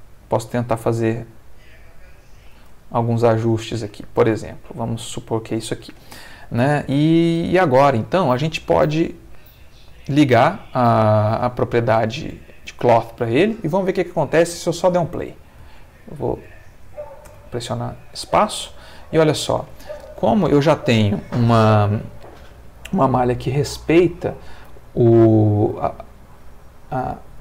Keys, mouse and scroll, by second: 0.0 shift+click, 0.7 shift+click, 1.1 shift+s, 2.5 ctrl+click, 2.8 ctrl+middle click, 3.5 ctrl+Tab, 4.1-5.7 ctrl+middle drag, 6.6 shift+middle click, 7.3-8.5 shift+middle drag, 9.9 click, 10.8 click, 12.3 click, 15.6 alt+a, 17.2 space.